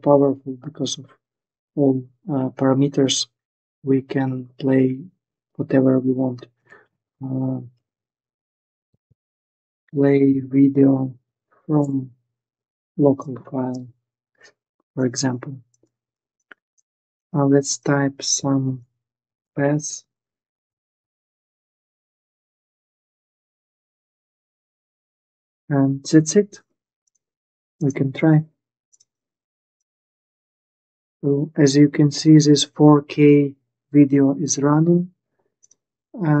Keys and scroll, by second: 6.1-10.5 typing, 10.9 Down, 11.6 Return, 18.1-22.8 typing, 23.1 Return.